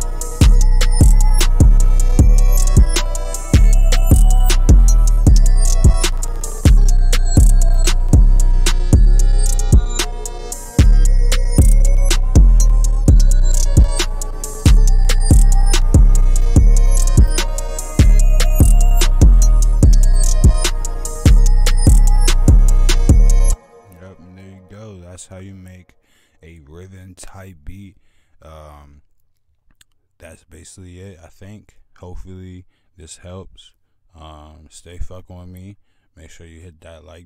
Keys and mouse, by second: 22.7 click, 23.1 click, 23.4-24.1 drag, 24.4-24.9 drag, 30.4-30.9 drag, 31.7 F1, 31.7 click.